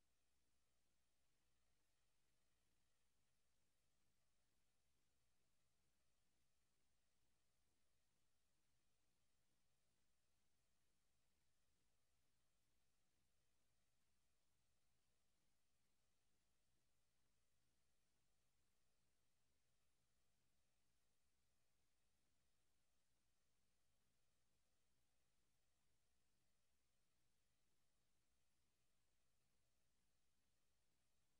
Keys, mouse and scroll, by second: 1.1 Escape, 2.9 Escape.